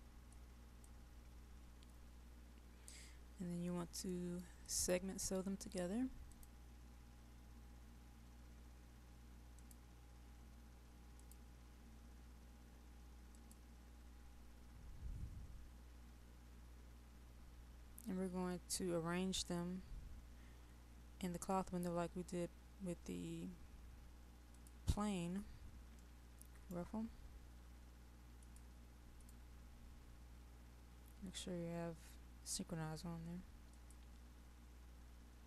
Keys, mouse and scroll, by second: 3.3-4.7 scroll up 1, 4.7 click, 16.3 scroll up 1, 18.6 right click, 24.6 click.